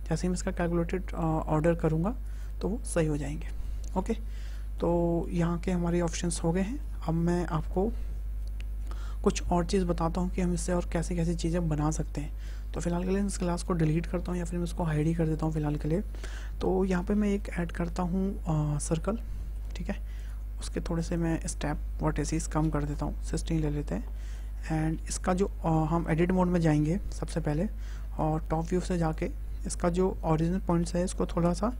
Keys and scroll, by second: 17.2 shift+a, 22.2 KP_1, 22.5 KP_6, 22.7 Return, 27.1 Tab, 28.2 `, 31.1 g, 31.6 x.